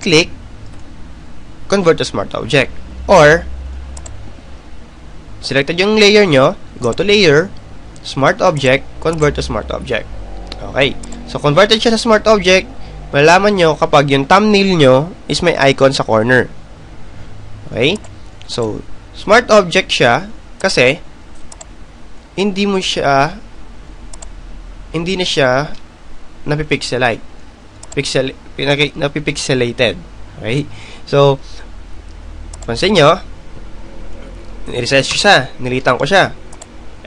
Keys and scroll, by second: 33.9 Return.